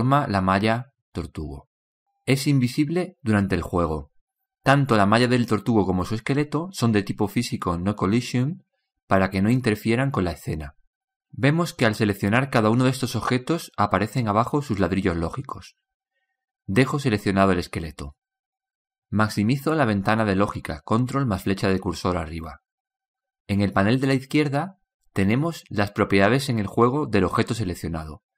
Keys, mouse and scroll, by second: 1.2-4.4 drag, 5.8-8.2 drag, 12.1-15.8 drag, 17.6-19.3 drag.